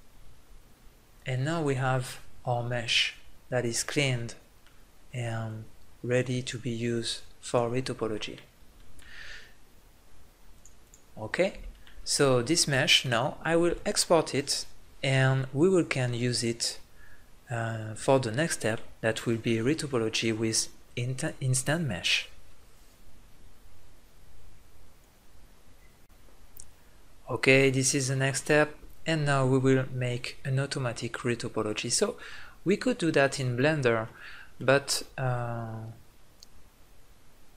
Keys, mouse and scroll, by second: 0.1-3.8 middle drag, 4.9 middle click, 5.5-7.8 drag, 7.8 middle click, 11.0 click, 11.7 middle click, 16.6 middle click, 32.0 middle click.